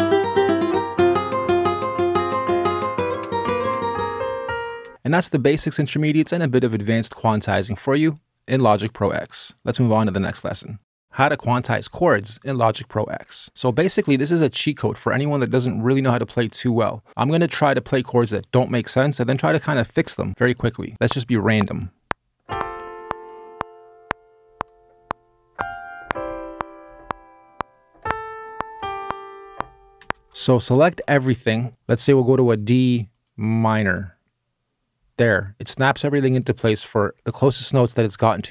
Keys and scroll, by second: 4.6 space, 20.9 r, 29.8 space, 30.9 super+a, 31.7 q.